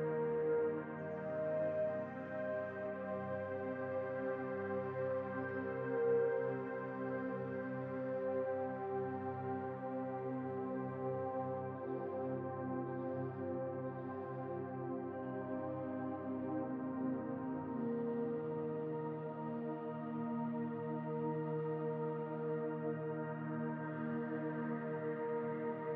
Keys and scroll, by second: 9.3-11.0 typing, 13.4 BackSpace, 15.7 ctrl+c, 17.1 ctrl+v, 19.3 ctrl+v, 20.4 ctrl+v.